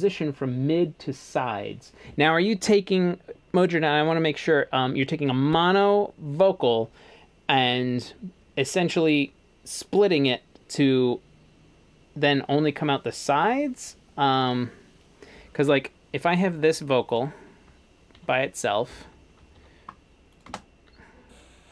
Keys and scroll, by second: 18.2-20.5 typing.